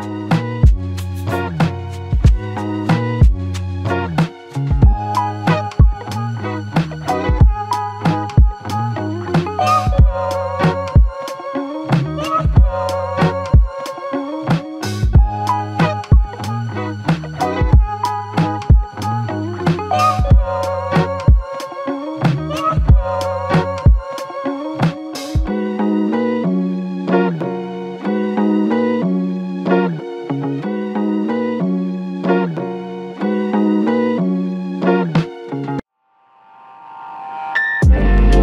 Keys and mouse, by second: 0.9 alt+click, 2.0 ctrl+click, 6.0 double click, 8.4 typing, 10.2 typing, 12.1 typing, 12.1 alt+shift+click, 14.3 typing, 17.8 double click, 21.2 ctrl+z, 21.4 ctrl+z, 22.0 ctrl+z, 22.8 ctrl+z, 24.9 double click, 29.1 double click.